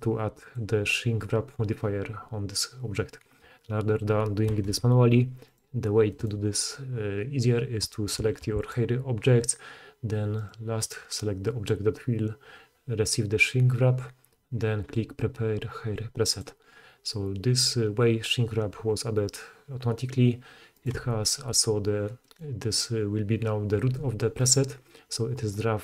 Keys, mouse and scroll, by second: 0.6-5.4 middle drag, 5.4 click, 5.6-10.4 middle drag, 8.2 g, 10.4 click, 10.5-15.1 middle drag, 15.1-20.7 drag, 20.8-25.8 drag, 23.8 g.